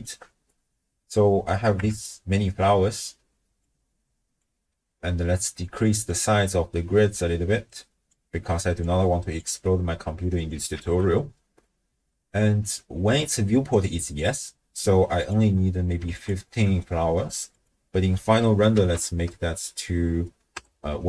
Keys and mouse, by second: 0.0 alt+shift+click, 1.8 KP_0, 3.7 click, 4.7 middle click, 6.1-8.1 drag, 8.8 click, 9.7 middle click, 10.4 click, 10.8 ctrl+x, 12.1 middle click, 15.2-16.2 drag, 16.5 middle click, 17.5-20.6 drag, 18.9 0.